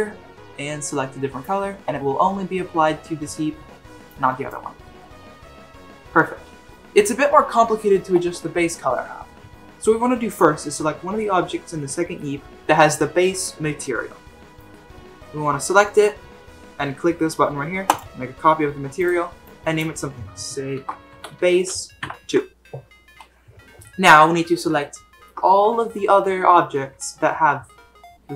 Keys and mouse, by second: 4.0 click, 17.9 click, 19.0-22.2 drag, 24.8-25.3 shift+middle drag.